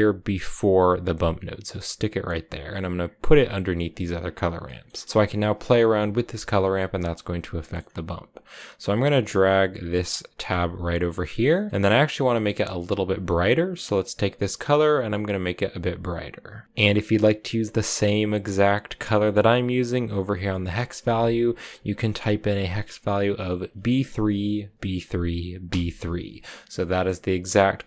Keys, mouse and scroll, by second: 2.1-4.1 drag, 6.8-9.1 middle drag, 9.1-11.5 drag, 11.5 middle click, 12.2 click, 16.6 click, 18.3 click, 26.7-27.8 middle drag.